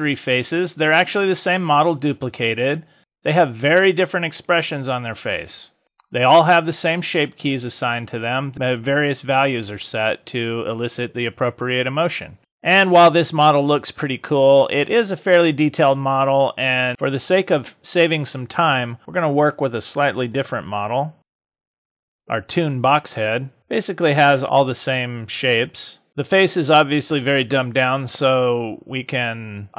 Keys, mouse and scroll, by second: 3.0 click, 3.9 click, 4.5 click, 5.5 click, 24.4 KP_3, 27.7 middle click.